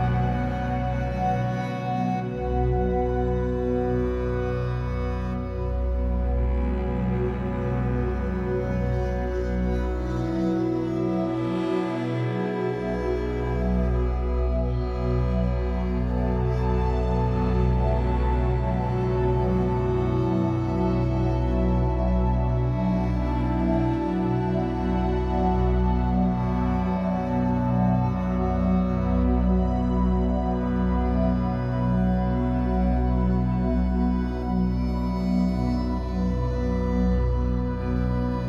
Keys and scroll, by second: 4.6 m.